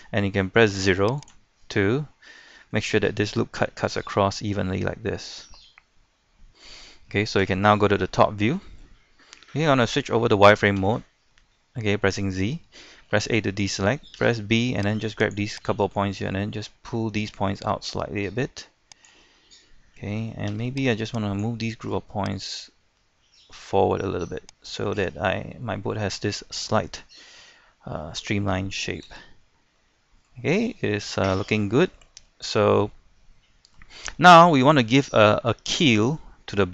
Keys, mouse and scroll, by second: 0.8 0, 1.2 click, 1.6 scroll down 1, 1.9-7.4 middle drag, 7.4 KP_7, 8.4 shift+middle click, 8.9-9.2 scroll down 1, 9.3 shift+middle click, 10.8 z, 11.3 scroll up 1, 11.6 shift+middle click, 13.1 a, 14.2 b, 14.9-19.6 drag, 20.5 b, 20.9-25.0 drag, 25.0-25.3 scroll down 1, 25.3 middle click, 26.1-26.5 scroll up 1, 26.5-29.1 middle drag, 29.1 z, 29.4 middle click, 30.5 scroll down 1, 30.8 shift+middle click, 32.2 scroll up 1, 32.4 shift+middle click, 33.7-34.2 scroll up 1, 34.5 shift+middle click, 36.2 scroll up 1, 36.5-36.7 scroll down 1.